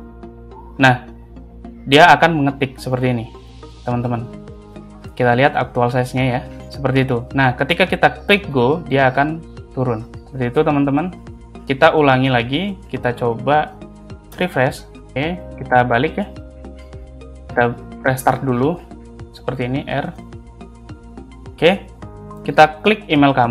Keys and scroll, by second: 14.3 Return, 15.0 Left, 21.0 r.